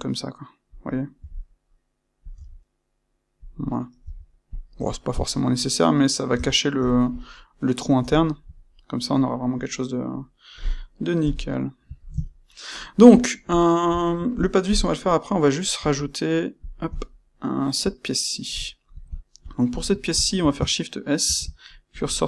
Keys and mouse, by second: 0.8 click, 1.1 e, 3.4 click, 4.0 e, 4.5 click, 4.7 Tab, 5.1-16.5 middle drag, 6.2 Tab, 11.2 KP_1, 16.5 click, 17.0-19.6 shift+middle drag, 19.6 click, 19.9-22.2 ctrl+middle drag, 21.2 shift+s.